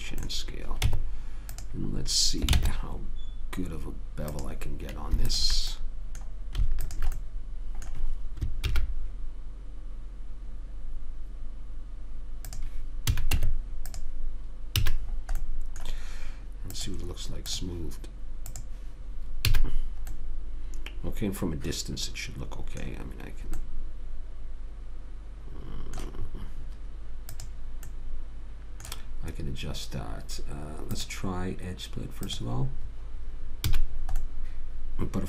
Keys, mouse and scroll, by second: 0.5-4.3 middle drag, 1.2 Tab, 2.9 ctrl+Tab, 5.6 click, 6.1-8.8 drag, 8.8-10.0 middle drag, 8.9 ctrl+b, 13.4 a, 13.6 Tab, 15.1 a, 17.0-18.6 drag, 19.8 a, 27.6 click, 31.3 click, 34.0 a, 34.5-35.2 middle drag.